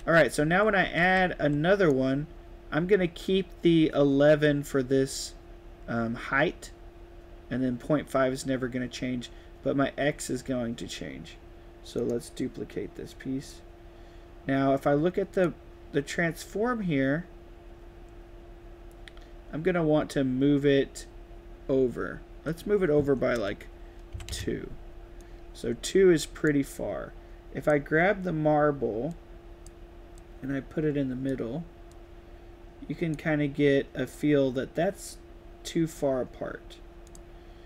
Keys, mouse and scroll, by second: 0.2-1.9 typing, 0.5-1.8 right drag, 12.0 right click, 13.4 click, 15.3 click, 22.4 click, 25.2 right click, 25.3 d, 25.6 right click, 26.1 a, 27.6 right drag, 29.0-29.6 drag, 30.1-31.3 drag, 31.8-32.7 drag, 37.0 click.